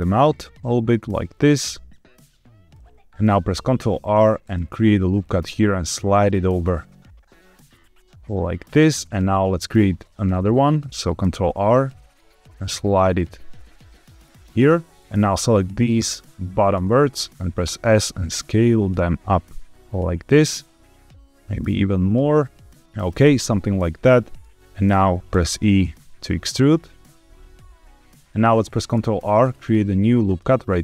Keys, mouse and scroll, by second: 2.6 click, 2.7 middle click, 3.5 ctrl+r, 8.5 click, 11.1 ctrl+r, 14.5 click, 15.0-16.2 drag, 16.8 middle click, 17.6 s, 22.6 s, 22.9 click, 23.3 middle click, 25.2 e, 28.1 click, 28.9 ctrl+r.